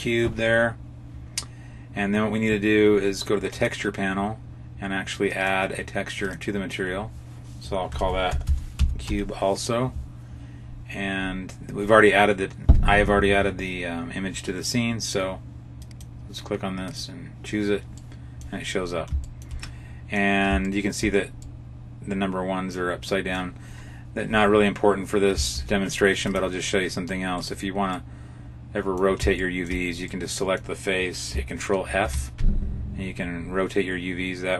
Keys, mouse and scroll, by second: 3.4 click, 5.2 click, 6.1 click, 15.7 click, 17.9 middle click, 18.6-19.0 scroll up 3, 19.1 shift+middle click, 19.5 middle click, 20.5 shift+middle click, 21.4 middle click, 25.4 ctrl+Tab, 27.3 right click, 27.8 middle click, 29.3 shift+middle click, 29.9 middle click, 31.7 ctrl+f.